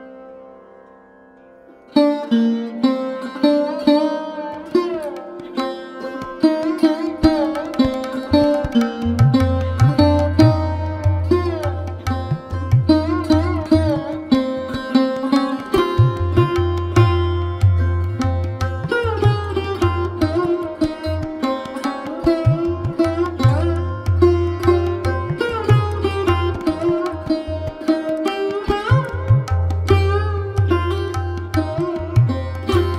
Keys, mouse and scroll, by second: 2.1 Tab, 2.4 scroll up 2, 2.6-3.0 shift+middle drag, 3.0 click, 5.4 scroll up 2, 5.6-6.0 shift+middle drag, 6.0 click, 6.3 click, 7.8 shift+z, 8.3 click, 10.5-12.0 scroll up 3, 12.0 middle click, 12.9 KP_1, 13.6 ctrl+KP_1, 14.1-14.6 scroll down 1, 14.6 c, 17.6 click, 17.9 click, 18.3 middle click, 19.1-19.5 scroll up 1, 19.5 KP_1, 20.7 c, 27.0 click, 27.6 Tab, 27.7 click, 28.0 scroll down 3, 28.2-29.4 middle drag, 29.4 scroll up 1, 29.5 middle click, 30.4 Tab, 31.3 c.